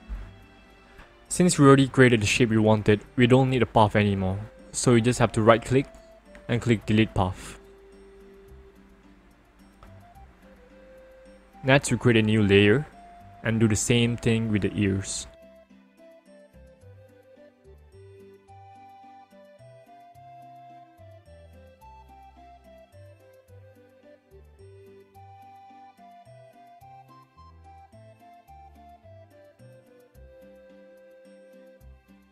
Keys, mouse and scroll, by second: 5.4 right click, 7.1 click, 11.2 click, 13.2 click, 17.5-18.7 ctrl+alt+scroll up 1, 18.7 click, 19.8 click, 20.7 ctrl+alt+z, 23.9 click, 26.3 click, 29.2 click, 30.9 click.